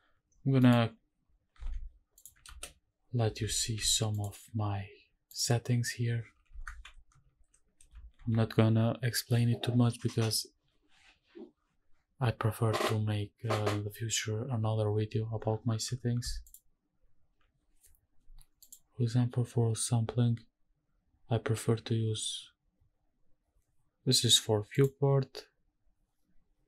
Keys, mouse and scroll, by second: 0.2 scroll down 1, 0.6 middle click, 1.2-1.6 scroll up 2, 1.6 shift+`, 2.5 ctrl+space, 3.5 shift+`, 5.3 click, 6.6 shift+`, 18.6 click, 24.7 click.